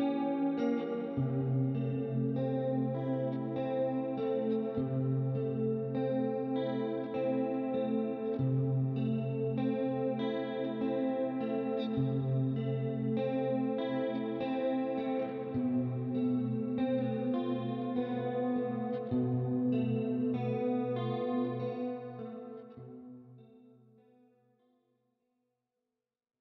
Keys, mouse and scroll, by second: 0.2 click, 1.7 click, 3.2 click, 5.2 middle click, 6.5 click, 7.8 click, 9.9 click, 10.8 shift+click, 11.6 click, 12.8 click, 13.5 click, 15.6 click, 16.4 right click, 18.0 middle click, 19.0 click, 19.3-24.5 typing, 24.7 click.